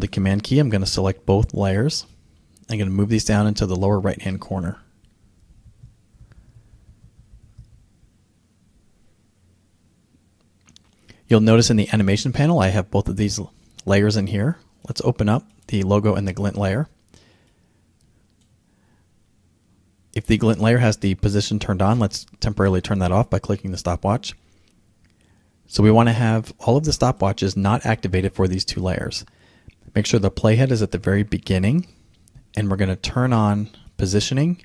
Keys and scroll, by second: 5.0 Down, 5.8 Left, 6.6 Down, 7.0 Left, 7.2 Down, 7.3 Left, 7.5 Down, 7.6 Left, 7.8 Down.